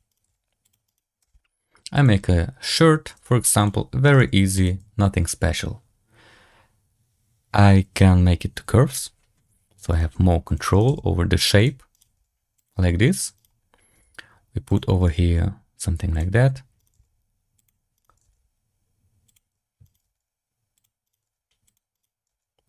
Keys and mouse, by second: 0.0 right click, 0.2 g, 0.8 right click, 1.1 e, 2.1 e, 4.0 right click, 4.1 g, 8.4 click, 9.8 right click, 10.0 g, 10.6 right click, 10.8 g, 11.8 right click, 12.0 g, 13.3 right click, 13.9 g, 14.9 right click, 15.1 g, 16.7 right click, 16.8 g, 17.9 right click, 18.2 g, 19.7 right click, 19.9 g, 21.0 right click, 21.2 g, 21.8 right click, 22.2 g.